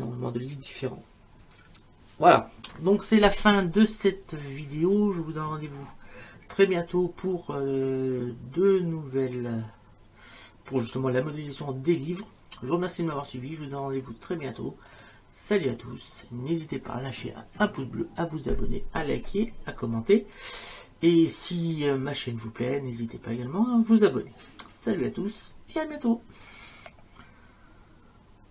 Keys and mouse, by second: 14.9 click.